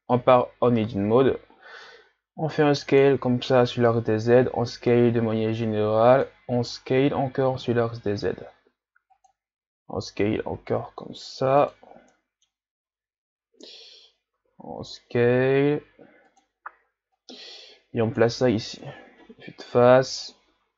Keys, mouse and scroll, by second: 1.1 s, 3.6 s, 6.8 s, 10.2 s, 11.9 scroll down 3, 12.1-14.3 middle drag, 14.3 s, 17.2-18.8 drag, 18.8 KP_1, 20.2 click.